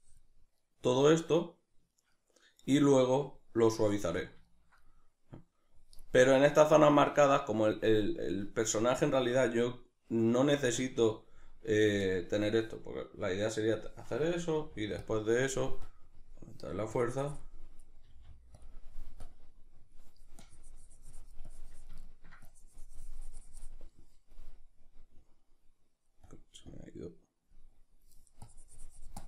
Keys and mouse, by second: 0.6-13.8 middle drag, 10.7 z, 13.8-15.1 drag, 14.5 f, 18.0 click, 18.0 f, 22.0-23.5 ctrl+middle drag, 23.5-29.2 drag.